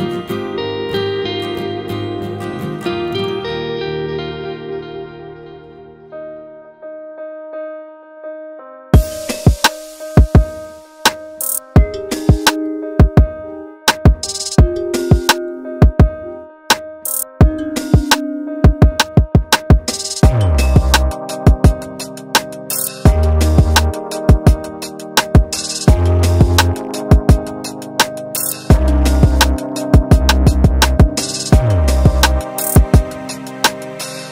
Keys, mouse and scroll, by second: 0.2 k, 4.5 alt+a, 5.9 k, 12.5-12.8 scroll up 2, 13.0 alt+a, 13.9 shift+middle click, 14.4-15.3 scroll up 1, 15.3 k, 19.3 alt+a, 19.6 click, 21.4 Delete, 22.0 scroll down 4, 22.8 scroll up 1, 23.1-25.3 middle drag, 25.3-25.8 scroll up 2, 25.8-27.3 shift+middle drag, 27.3-27.9 scroll down 1, 27.9 middle click, 28.1-28.5 scroll up 1, 28.5-29.6 middle drag, 29.6 scroll down 2, 29.9 Tab, 30.3 alt+a, 30.6 KP_1, 31.2-34.0 middle drag, 34.0-34.3 scroll up 3.